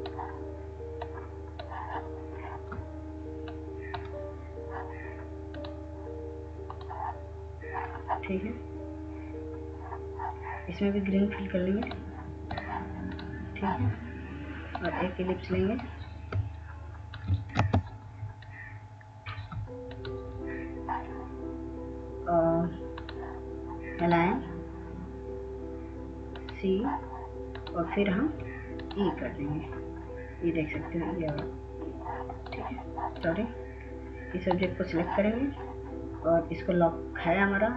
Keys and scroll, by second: 18.7 ctrl+space.